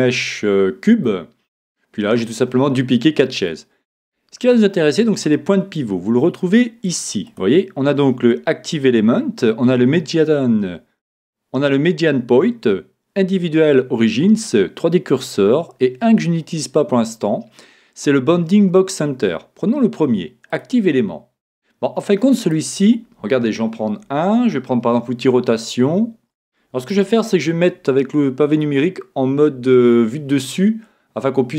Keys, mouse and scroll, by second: 0.4-1.2 scroll up 1, 1.2-2.8 middle drag, 3.4-5.4 middle drag, 7.2-9.2 drag, 22.4 right click, 25.2 r, 28.6 KP_7, 30.8-31.5 middle drag.